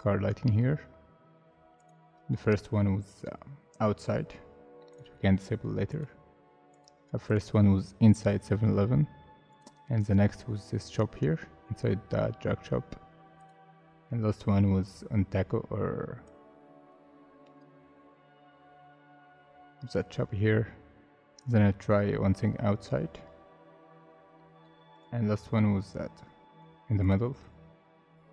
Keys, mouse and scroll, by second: 14.8-15.3 scroll up 1, 25.6 scroll down 1.